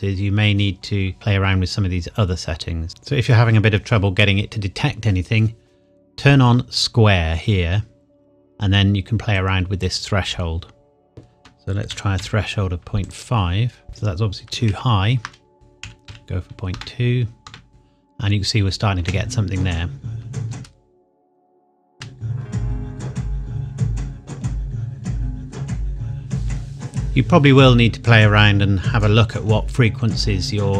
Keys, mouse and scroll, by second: 2.9 click, 9.4 click, 11.9 KP_Decimal, 12.2 KP_5, 13.1 click, 13.9 scroll up 1, 14.7 ctrl+z, 15.5 click, 16.1 KP_2, 16.8 KP_Enter, 17.7 click, 19.0 space, 21.4 click, 21.9 space.